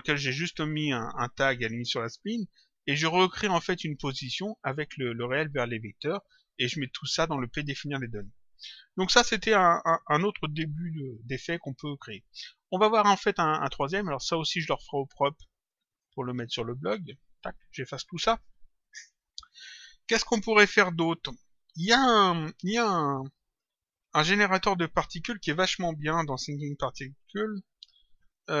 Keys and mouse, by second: 12.7 click, 14.8 click, 15.9 click, 17.2 click, 20.6 click.